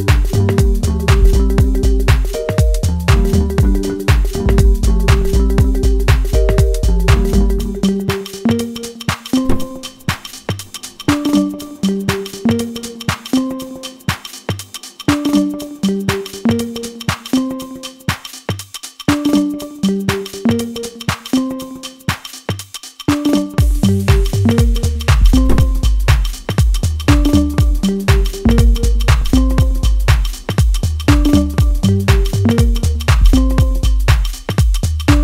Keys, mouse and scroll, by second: 1.2-1.8 scroll down 1, 2.7 middle click, 3.9 scroll up 1, 5.1-8.7 middle drag, 14.6-22.8 drag, 22.8 middle click, 26.1-29.1 middle drag, 29.1-35.2 drag.